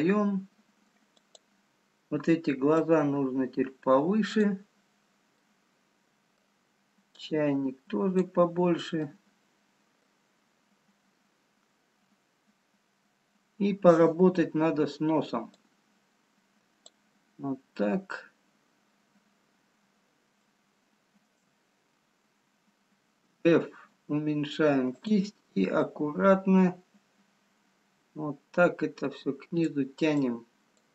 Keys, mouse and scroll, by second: 1.2 click, 2.0-2.5 scroll down 2, 3.0 click, 5.3 middle click, 7.1 click, 8.5-8.9 scroll down 2, 9.0 middle click, 11.0 scroll up 1, 12.0-13.1 scroll up 2, 15.8 click, 19.0-19.8 scroll up 2, 21.2 shift+middle click, 21.2 shift+scroll up 1, 22.8-23.7 scroll down 2, 23.7 f, 26.3 click.